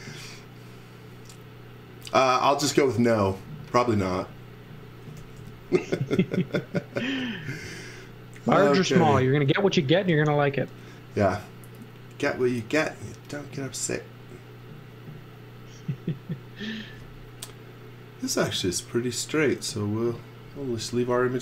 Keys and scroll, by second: 2.6 x, 5.4 l, 20.7 space.